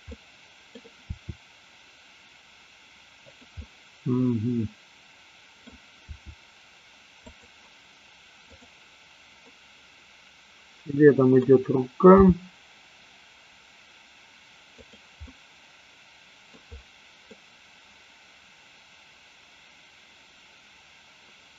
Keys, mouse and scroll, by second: 0.2-0.8 middle drag, 1.2 r, 3.7-5.9 middle drag, 6.2 r, 8.4 click, 9.4-11.4 middle drag, 12.3 g, 14.9 click, 15.2-16.5 middle drag, 17.4-21.5 middle drag.